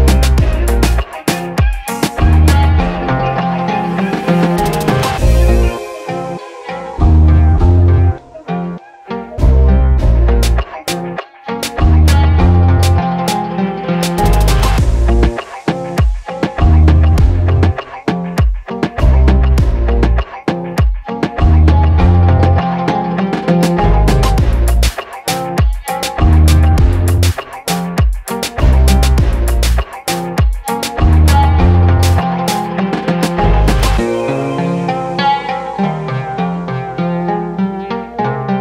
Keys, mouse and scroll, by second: 2.3-23.7 drag, 23.7 v, 24.6 click, 32.1 click, 37.6 v, 38.5 click.